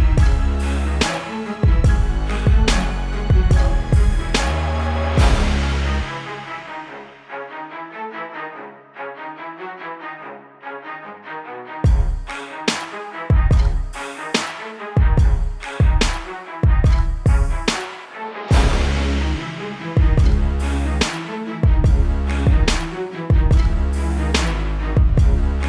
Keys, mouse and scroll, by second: 19.2 click.